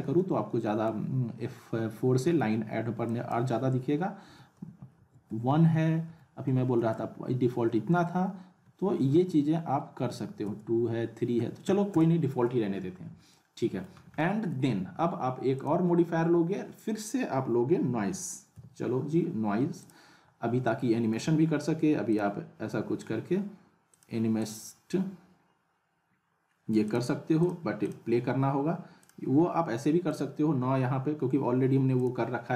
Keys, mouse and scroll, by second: 3.0 click, 13.3-13.9 alt+middle click, 14.0 scroll down 1, 14.2-14.8 alt+middle drag, 15.5 click, 18.5 n, 19.8 click, 20.6-21.3 alt+middle drag, 22.1 click, 26.9 click.